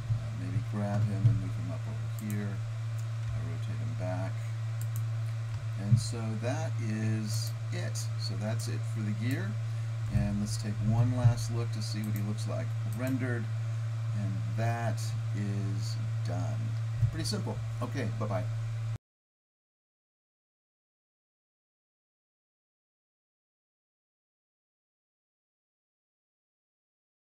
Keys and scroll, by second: 1.4 g, 3.3 r.